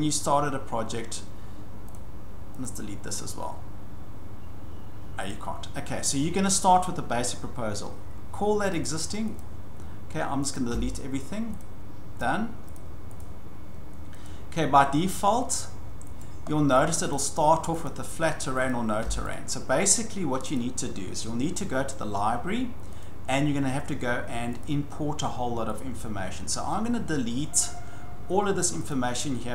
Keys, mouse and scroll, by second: 1.9 click, 2.6 click, 5.3 click, 8.7 click, 9.4 click, 10.5 click, 10.7 Delete, 11.6 click, 12.2 click, 12.7 click, 13.2 click, 14.2 click, 16.2 click, 16.5-16.9 scroll, 17.1 click, 17.4-17.7 scroll, 17.8 click, 18.7 click, 19.0 Delete, 19.3 click, 20.5 click, 21.1 scroll down 6, 23.0 click, 24.6 click, 25.8 click, 28.9 click.